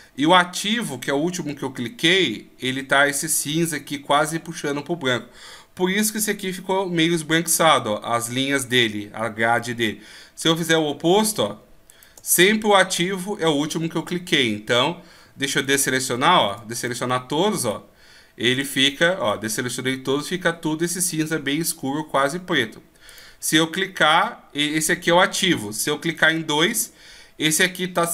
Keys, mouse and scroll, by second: 10.5 right click, 11.2 shift+right click, 11.9 shift+right click, 15.6 a, 17.6 right click, 18.5 right click, 23.1 right click, 26.1 shift+right click.